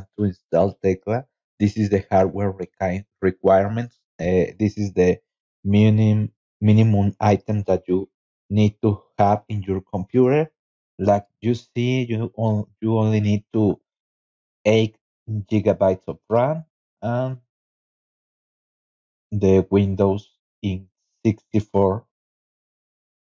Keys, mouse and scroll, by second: 14.9 scroll down 2, 15.9 click, 22.8 click.